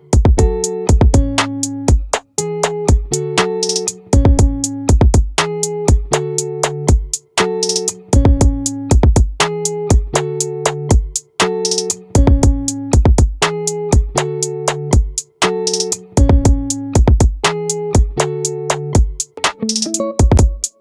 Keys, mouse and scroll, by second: 3.8 r, 12.2-14.6 drag, 14.8 click, 19.7 middle click.